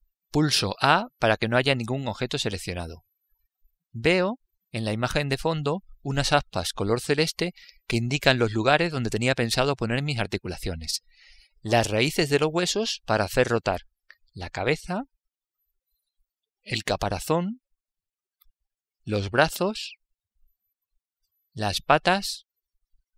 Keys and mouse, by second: 2.3 a, 4.6-6.6 middle drag.